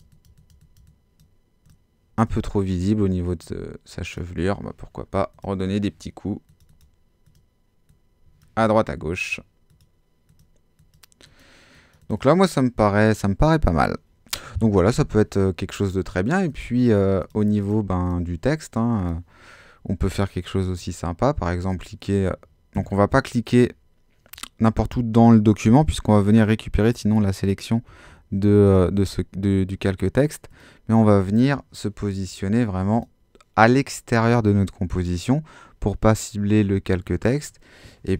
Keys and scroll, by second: 22.7 ⟲, 27.9 ⟲.